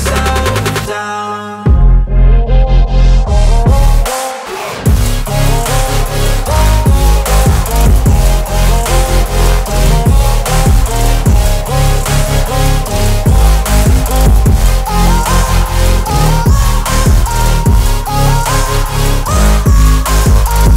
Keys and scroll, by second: 5.9 ctrl+z, 6.5 space, 8.8 space, 9.7 Delete.